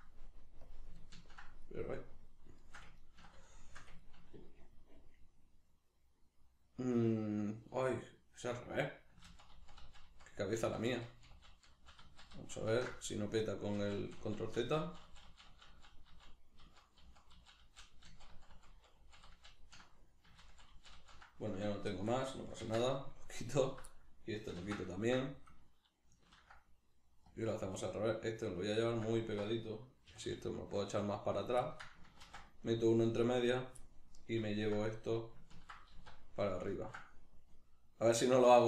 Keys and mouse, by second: 0.7 click, 1.1-23.6 ctrl+middle drag, 13.8 ctrl+z, 20.4 ctrl+z, 21.9 2, 22.7 ctrl+x, 23.6 alt+right click, 23.9-28.9 middle drag, 24.6 ctrl+x, 26.3 ctrl+r, 28.9 click, 29.1 alt+right click, 30.1 g, 31.5 click, 31.6-33.0 ctrl+middle drag, 32.3 ctrl+r, 33.5 right click, 33.8-35.6 middle drag, 35.6 ctrl+right click, 35.9 alt+q, 36.7-38.6 ctrl+middle drag.